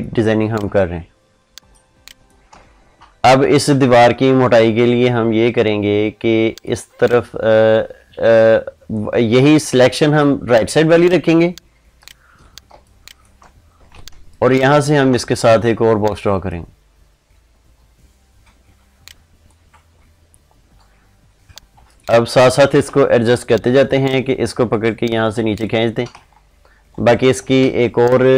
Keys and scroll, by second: 12.5 ctrl+space, 27.5 ctrl+space.